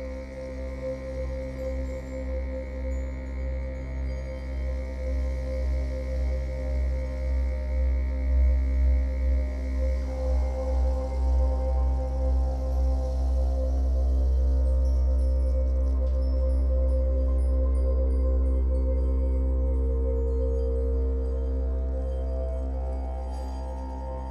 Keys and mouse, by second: 0.1-1.6 ctrl+alt+drag, 1.7-2.8 ctrl+drag, 4.0-7.0 drag, 8.4-9.7 alt+drag, 9.8-10.9 alt+shift+drag, 11.2 ctrl+click, 12.2-15.0 alt+drag, 13.7 ctrl+middle click, 15.0-24.3 ctrl+z, 15.6-24.3 alt+shift+drag, 15.6 alt+shift+middle click, 16.1 ctrl+alt+middle click, 17.7 ctrl+middle click, 18.8 ctrl+middle click.